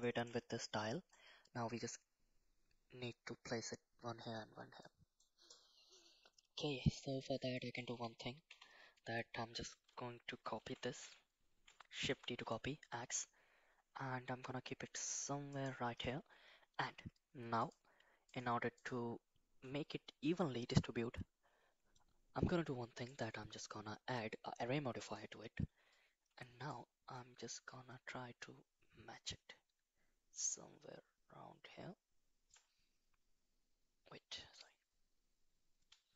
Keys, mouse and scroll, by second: 0.0 shift+middle drag, 0.9 middle click, 4.8 middle click, 6.5 KP_1, 7.6 shift+middle drag, 8.0 Tab, 8.6 Tab, 10.6 shift+g, 12.5 shift+d, 17.6 click, 18.3 click, 18.8-25.4 drag, 26.7 shift+click, 28.0-30.5 shift+middle drag, 30.5-32.6 shift+drag, 34.6-36.1 drag.